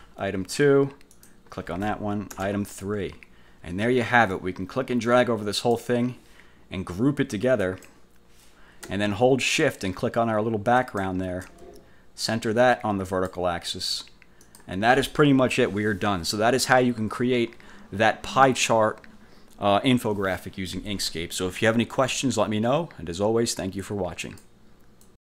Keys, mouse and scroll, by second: 0.0 BackSpace, 1.3 click, 2.4 BackSpace, 2.6 3, 3.1 F1, 4.4-6.0 drag, 7.8 click, 10.9 shift+click, 13.2 click, 14.6 click, 24.4 click, 25.2 click.